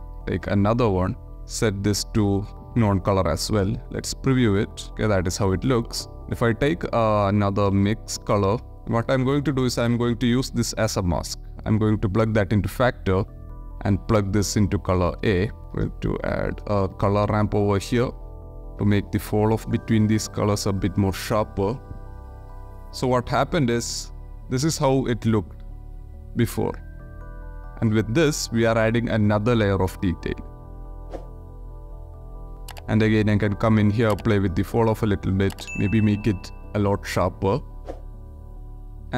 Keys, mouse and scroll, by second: 1.0 click, 1.4-2.4 drag, 3.0 click, 3.5 ctrl+shift+click, 4.6 shift+drag, 5.2 click, 5.9 click, 6.2 shift+a, 9.6-11.3 drag, 11.8 click, 12.4 ctrl+shift+click, 12.6 ctrl+shift+middle click, 13.4 click, 14.6 shift+click, 15.3 click, 15.5 shift+a, 16.5 shift+a, 19.0-19.6 drag, 20.4-21.2 drag, 21.8-22.2 drag, 23.7 ctrl+shift+click, 24.5-26.6 drag, 27.5 ctrl+shift+click, 29.0-29.7 drag, 30.0 ctrl+shift+click, 30.7 shift+click, 32.3 click, 33.0-34.0 drag, 34.5-35.4 drag, 35.6 click, 37.4-38.3 drag, 38.4-39.0 drag.